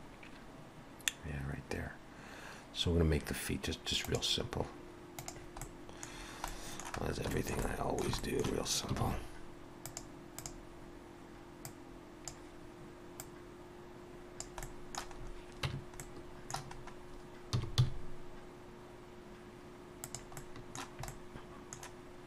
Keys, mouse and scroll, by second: 5.6 middle click, 6.2-6.5 scroll down 2, 6.5 middle click, 7.0 scroll down 1, 7.3 shift+middle click, 7.6 middle click, 8.2 shift+middle click, 9.0 shift+a, 10.9-11.2 scroll down 2, 11.7 click, 13.9 click, 14.6 middle click, 15.2-15.8 scroll up 3, 15.6 Tab, 16.0 middle click, 16.8 scroll up 2, 17.5 s, 20.4 middle click.